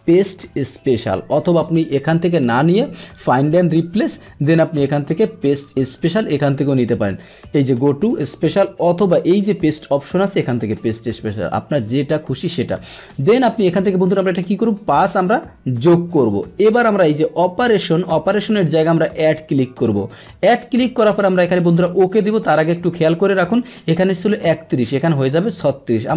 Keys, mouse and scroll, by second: 1.5 click, 3.1 click, 9.0 click, 10.4 click, 11.7-12.7 drag, 19.3 click.